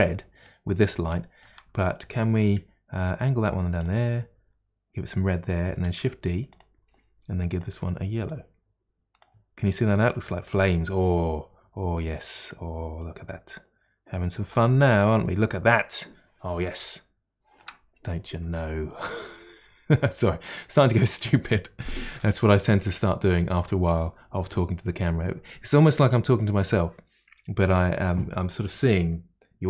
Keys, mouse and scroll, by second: 0.3-3.2 middle drag, 3.2-5.9 drag, 5.9 shift+d, 7.5 click, 8.3 click, 12.2 click, 13.3-16.3 drag, 16.7-29.6 shift+middle drag.